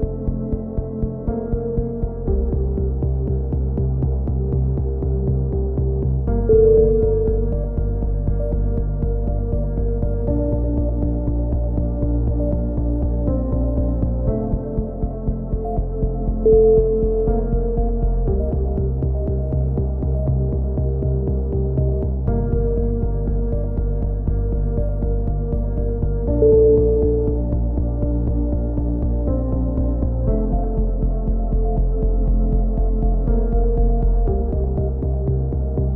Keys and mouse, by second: 0.6 a, 4.7 z, 5.4 a, 5.5 z, 7.3 a, 8.8 z, 10.7 KP_7, 11.0 z, 11.2 click, 15.8 k, 21.6 a, 21.8 z, 22.2-22.6 drag, 22.6 KP_1, 22.8 middle click, 23.7 z, 24.8-25.3 drag, 27.3 right drag, 27.3 KP_1, 27.4 middle click, 27.4 z, 27.8 click, 28.6 z, 29.0 right click, 29.0 z, 29.2 middle click, 29.7 click, 30.6 a, 30.7 z, 31.3 click, 31.5 middle click, 31.8 middle click, 32.6 KP_3, 33.0 z, 33.3 z, 33.5-33.9 right drag, 33.8 click, 33.9-34.3 middle drag, 34.6 ctrl+z, 34.8 a, 35.4 z.